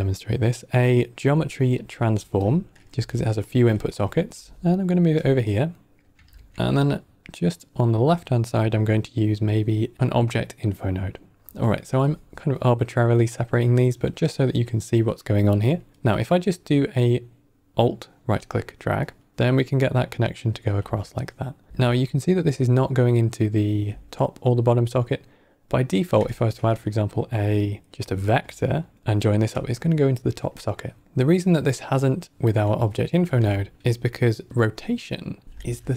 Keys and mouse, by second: 3.1-3.6 ctrl+middle drag, 3.8 middle click, 4.2 g, 5.7 middle click, 6.1 shift+a, 13.1 middle click, 16.0-18.9 alt+right drag, 21.1-21.5 ctrl+right drag, 22.2-23.6 alt+right drag, 26.2 shift+a, 28.6 ctrl+right click, 28.9 alt+right click, 32.7-33.2 middle drag, 33.5 ctrl+middle click, 34.4-35.7 drag.